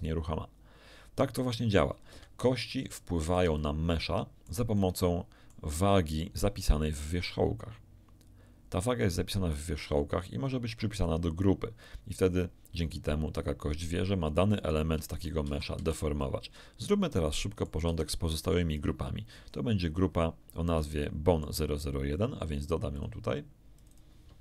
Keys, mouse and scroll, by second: 2.1 Escape, 2.5 scroll down 1, 2.9 shift+click, 4.2 middle click, 4.7 middle click, 14.5 right click, 14.9 Tab, 15.4 a, 15.7 z, 16.1-17.8 middle drag, 17.8 b, 18.1 click, 19.4 scroll up 1, 20.1 scroll down 1, 20.8 shift+middle click, 22.9 click, 23.7 click.